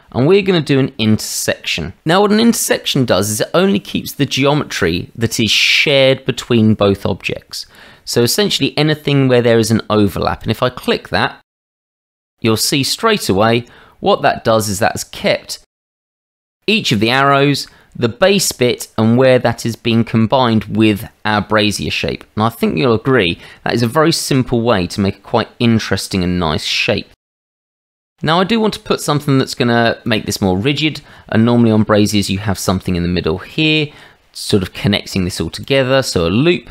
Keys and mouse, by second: 14.3-15.8 drag, 15.8-16.5 middle drag, 17.2-17.7 drag, 19.1 middle click, 19.2-20.5 drag, 19.2-20.5 right drag, 21.8-26.0 drag, 21.8-26.0 right drag, 26.7-27.2 middle drag, 27.8 click, 27.8 right click, 28.1-28.5 middle drag, 30.1-33.1 drag, 35.6 click, 36.4-36.7 shift+middle drag.